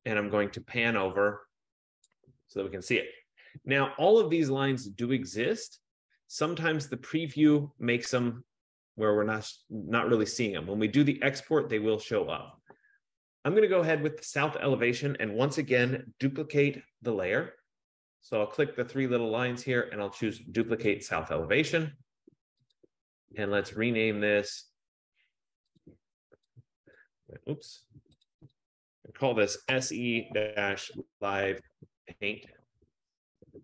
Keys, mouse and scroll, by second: 0.4-1.4 scroll, 1.5-2.2 ctrl+=, 2.2 click, 3.2 click, 14.3 click, 19.3 click, 21.2 click, 23.0 click, 23.8 click, 24.0 click, 26.0 click, 27.1 click, 28.4 click, 28.7 click, 29.4-33.6 typing.